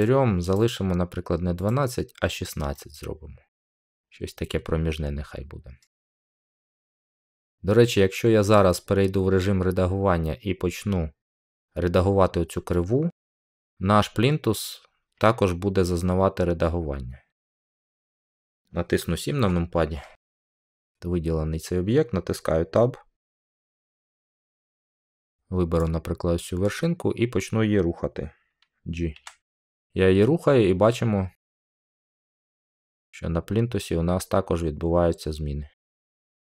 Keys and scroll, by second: 19.2 7, 24.0 Tab, 29.0 g.